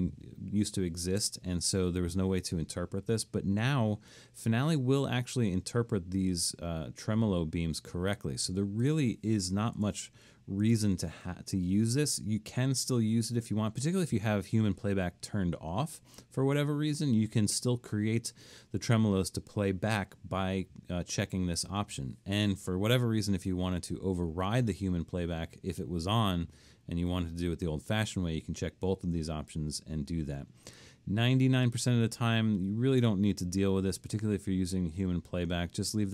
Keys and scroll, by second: 4.4 Escape, 9.8 BackSpace.